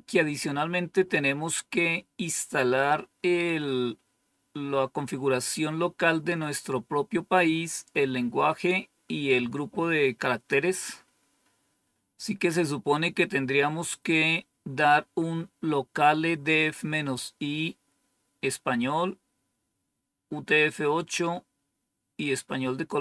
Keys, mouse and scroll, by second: 1.0-23.0 scroll down 1.